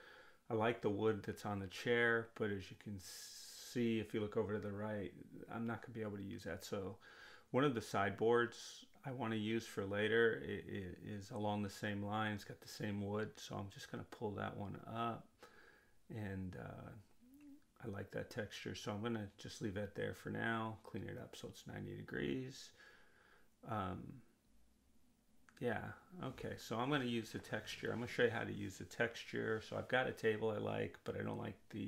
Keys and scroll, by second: 21.1 9, 21.3 Return.